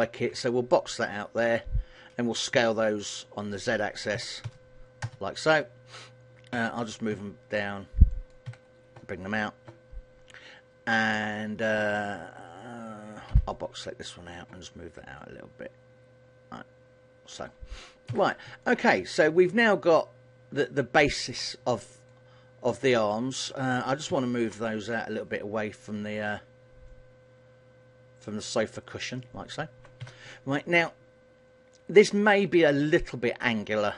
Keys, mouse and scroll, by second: 0.5 b, 2.7 s, 6.7 g, 8.4 click, 8.6 a, 13.4 b, 15.3 click, 18.2 a, 18.7 middle click, 22.1 alt+right click, 22.9 alt+right click, 24.2 ctrl+l, 25.0 KP_1, 27.0 click, 29.1 middle click, 30.1 a, 30.4 middle click.